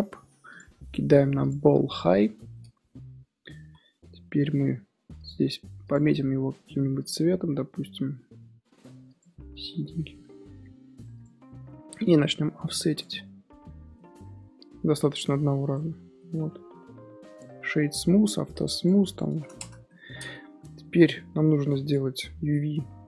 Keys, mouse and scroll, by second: 1.9 scroll down 3, 2.1 middle click, 2.5 scroll up 2, 3.5 z, 5.1 click, 5.8 click, 11.1 click, 12.8 click, 13.9-15.1 middle drag, 15.1 right click, 16.0 scroll down 1, 16.1-17.9 middle drag, 17.9 click, 18.7 click, 19.0 click, 19.8 middle click, 20.2-20.5 scroll up 1, 20.5 Tab, 20.8-22.6 middle drag, 22.6 2.